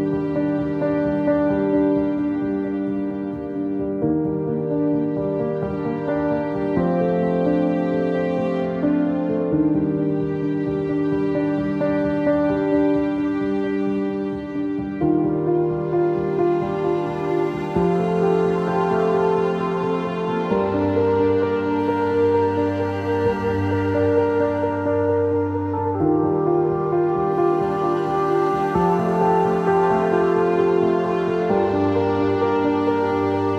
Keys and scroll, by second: 14.5-15.3 typing, 20.1 ctrl+z.